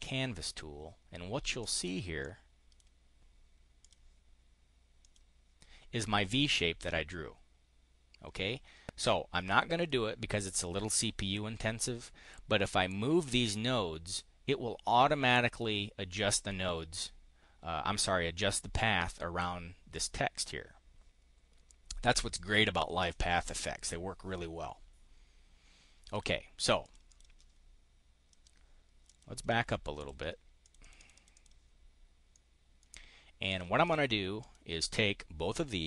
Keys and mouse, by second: 1.6 click, 2.1 click, 3.7 click, 4.9 click, 8.9 click, 8.9 right click, 26.0 click, 26.7 click, 27.0 click, 28.2 click, 28.9 click, 29.9 click, 30.5 click, 30.9 click, 31.2 click, 32.2 click, 33.4 click, 33.7 click, 34.2 click.